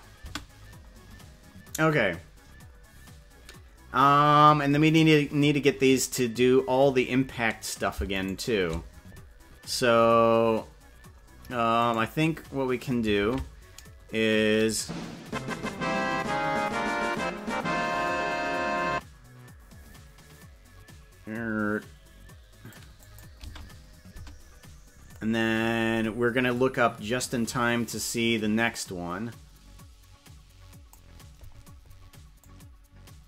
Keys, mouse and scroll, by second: 0.2 space, 4.9 click, 6.3 right click, 8.3 shift+right click, 11.9 right click, 13.3 ctrl+Tab, 14.6-22.7 drag, 23.0 click, 23.5 space, 24.3 space, 27.9-31.0 drag, 32.4-33.2 drag.